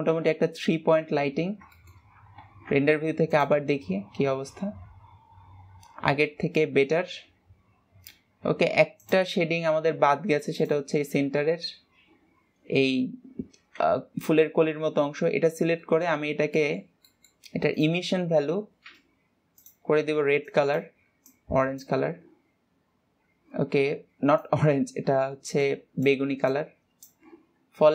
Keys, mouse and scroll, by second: 0.7 KP_0, 1.8-2.3 scroll up 2, 2.3 shift+middle click, 2.6-3.2 scroll up 1, 3.2 ctrl+s, 3.8 click, 9.5 click, 21.0 click.